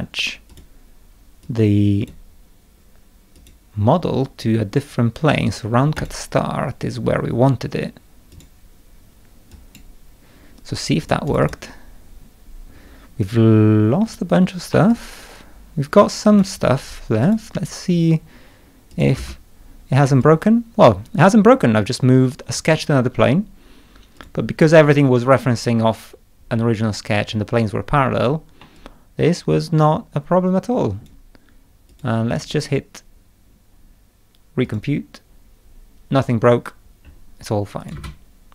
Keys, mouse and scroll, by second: 0.5 click, 1.4 click, 3.3 click, 6.0 click, 8.3 click, 9.5 click, 11.0 click, 11.3 click, 11.4 click, 12.7 scroll up 2, 14.0-14.4 scroll down 1, 14.7-16.3 middle drag, 14.9-16.4 drag, 17.2 click, 17.9 scroll down 1, 18.9 click, 19.1 space, 20.0-22.5 middle drag, 20.2-22.6 drag, 24.2 click, 28.6-31.0 middle drag, 28.8-31.0 drag, 31.9 click, 32.3 click, 32.5 right click, 34.6 click, 36.1 scroll up 1, 36.4 scroll down 1, 36.9 scroll up 1, 37.0 scroll down 2, 37.8 click, 37.9 space.